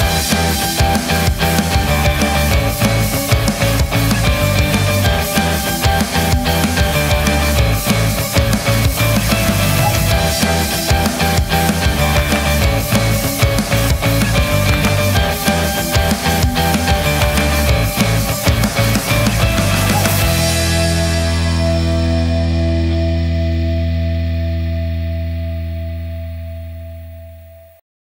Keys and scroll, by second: 3.3 v, 4.2 c, 5.0 v, 5.5 Delete, 7.9 Return, 11.9 space, 13.0-14.1 typing, 15.5-16.5 typing, 18.1 Up, 18.2 shift+a, 18.2 shift+n, 18.3 shift+y.